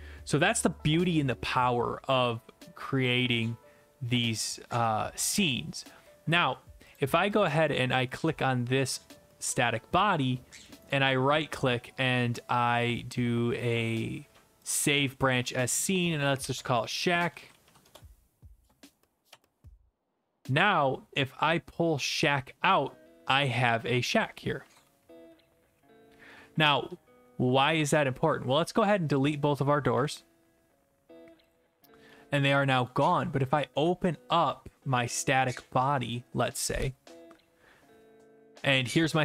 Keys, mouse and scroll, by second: 7.0 click, 7.4 click, 10.9 right click, 14.7 click, 16.9-18.1 typing, 19.8 Return, 24.0 click, 24.4-27.4 typing, 28.0 right click, 28.9 click, 28.9 scroll down 1, 29.2 shift+click, 30.0 Delete, 31.5 click, 32.3-32.7 typing, 32.9 right click, 35.1 click, 36.1 click.